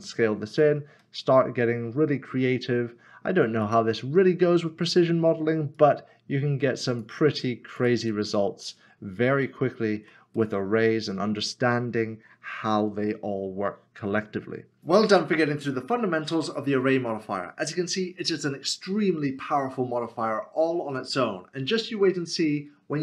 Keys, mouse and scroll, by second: 0.5 s, 0.7 click, 1.2 middle click, 3.6 click, 5.7 click, 8.1 click, 8.4 middle click, 9.0 scroll up 1, 9.5 shift+middle click.